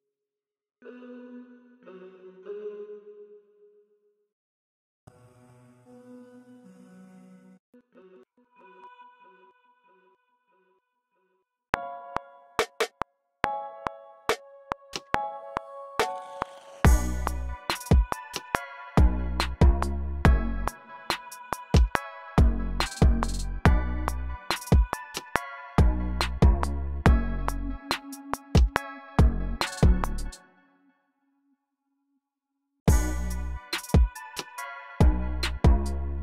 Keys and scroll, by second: 0.0-3.1 typing, 0.4 super+k, 2.9 super+k, 4.5 super+k, 4.7-12.1 typing, 12.1 super+k, 16.8-17.7 typing, 19.2-21.1 typing, 22.5 typing, 23.6-24.5 typing, 25.7 typing, 27.0-27.7 typing, 28.8 typing, 30.0-32.2 typing, 30.2 super+k, 33.6 super+r, 34.3 super+z.